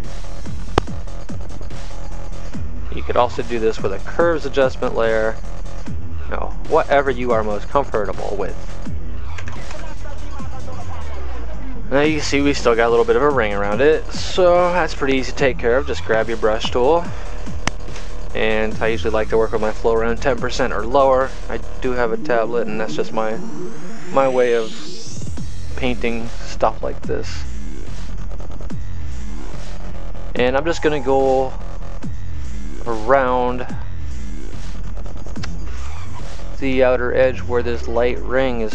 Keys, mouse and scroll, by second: 0.5 click, 5.6 click, 9.0 click, 14.5 space, 14.9 click, 17.3 b, 24.0 click, 28.3 click, 31.1 click, 34.0 click, 38.0 click.